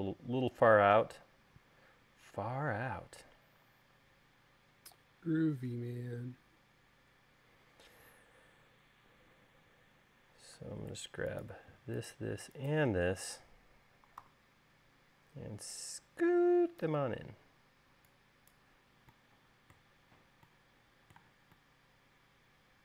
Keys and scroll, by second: 1.2 u, 14.4 v.